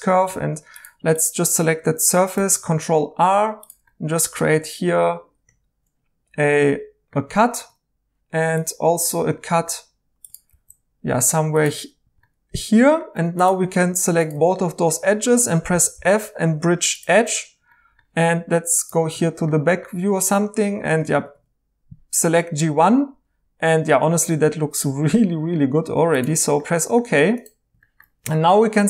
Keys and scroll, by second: 0.4 Tab, 2.3 ctrl+r, 10.5 ctrl+r, 13.1 2, 15.7-16.1 typing, 20.9 Tab, 21.1 Tab, 21.3 Tab.